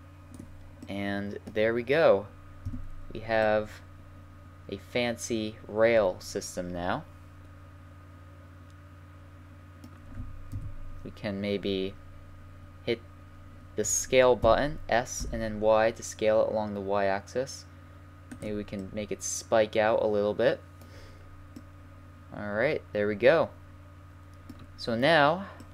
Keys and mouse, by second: 1.1 middle click, 1.3 middle click, 2.7 z, 5.4 middle click, 5.6 middle click, 9.5-10.5 middle drag, 10.5 KP_3, 14.4 s, 18.8 middle click, 22.1-23.5 middle drag, 23.9 middle click, 24.3 middle click.